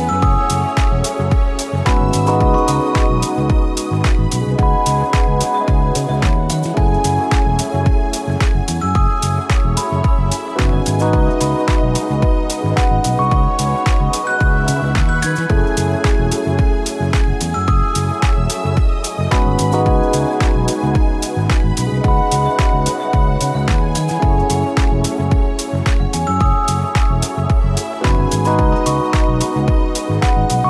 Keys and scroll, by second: 8.2 ctrl+t, 14.4 ctrl+a, 14.5-15.8 typing, 17.5-18.2 space, 22.1 v.